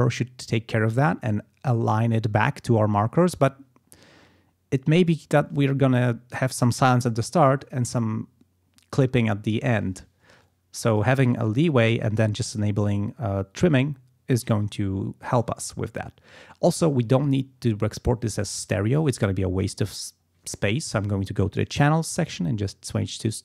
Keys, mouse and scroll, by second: 10.4 click, 19.0 click, 22.6 click.